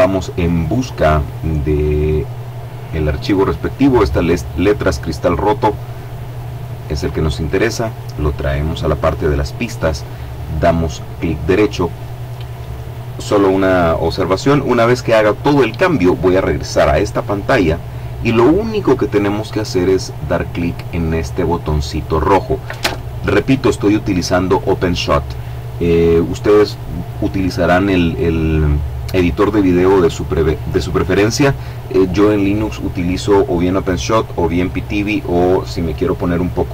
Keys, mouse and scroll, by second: 1.2 click, 1.9 click, 6.5 click, 7.8-9.7 drag, 12.3 click.